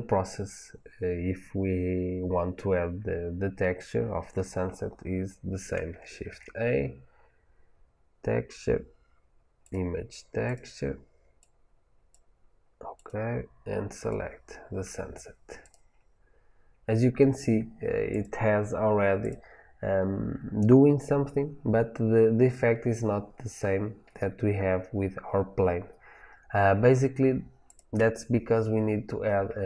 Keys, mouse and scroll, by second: 12.0-15.6 drag, 18.0 click, 19.1 click, 19.7 scroll up 1, 27.6 click.